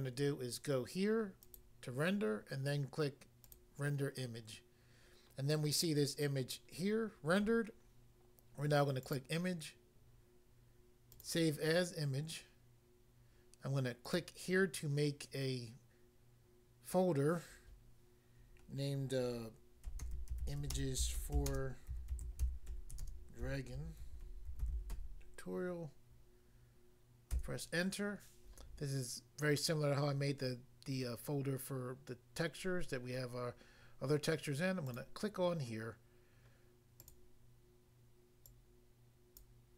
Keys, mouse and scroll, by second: 1.4 click, 1.6 click, 3.4 click, 9.0 click, 11.1 click, 11.2 click, 14.1 click, 14.2 click, 19.9-23.1 typing, 24.3-25.0 typing, 27.3 Return, 34.9 click, 35.0 click, 37.0 click, 37.1 click, 38.4 click, 39.4 click.